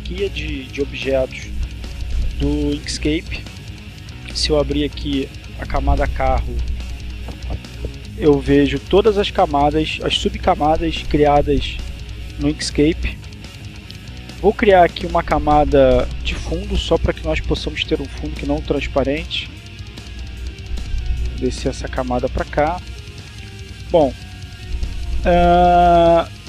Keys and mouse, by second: 4.1 click, 13.0 click, 15.7 click, 16.8-18.5 drag, 20.4-21.5 drag, 24.2 click.